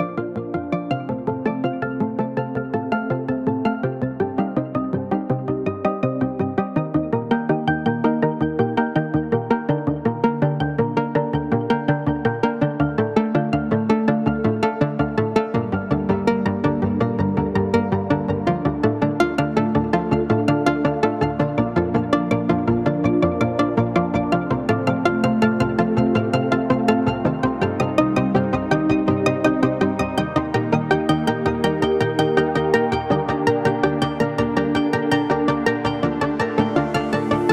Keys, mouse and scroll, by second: 2.3 typing, 4.5 click, 4.5 typing, 4.7 shift+click, 4.9 shift+right click, 6.7 typing, 7.4 click, 8.0 right click, 11.0 alt+Tab, 11.0 typing, 11.9 right click, 14.0 click, 14.0 typing, 17.4 typing, 17.5 ctrl+g, 17.9 click, 20.1 typing, 20.5 shift+click, 21.3 click, 30.5 space, 30.9-32.5 ctrl+drag, 32.5 space, 33.0 space, 33.3 ctrl+click, 34.4 right click, 35.3-37.5 drag.